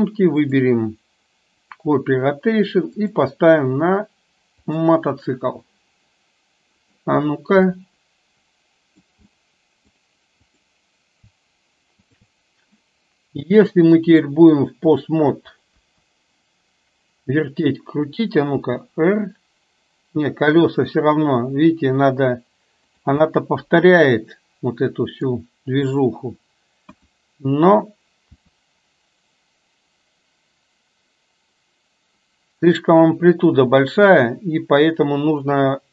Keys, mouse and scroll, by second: 0.4-1.9 drag, 3.1 click, 7.9-9.1 middle drag, 9.5-10.1 middle drag, 10.5 click, 12.1 shift+click, 14.2-15.3 drag, 15.9 KP_1, 18.7 r, 23.5-25.5 middle drag, 26.8 KP_1, 28.4 r.